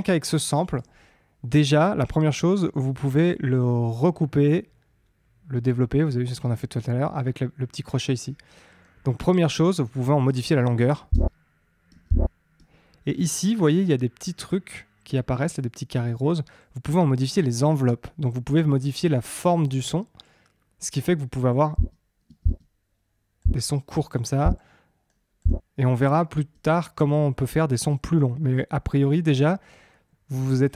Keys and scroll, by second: 11.1 space, 21.7 space, 25.9 space.